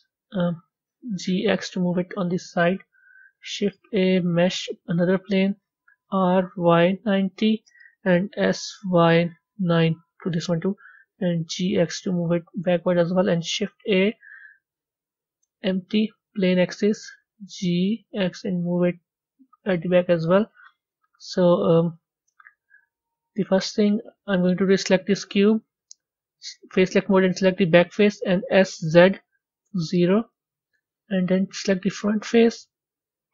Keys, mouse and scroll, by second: 0.8 g, 3.2 shift+a, 5.9 r, 8.2 s, 10.9 g, 13.5 shift+a, 17.1 g, 19.8-20.4 middle drag, 20.4 scroll down 3, 21.4 scroll up 1, 21.9-24.1 middle drag, 24.1 click, 25.4 b, 26.6 click, 27.2-28.5 middle drag, 30.2-31.5 middle drag, 31.5 click, 31.9-33.3 middle drag.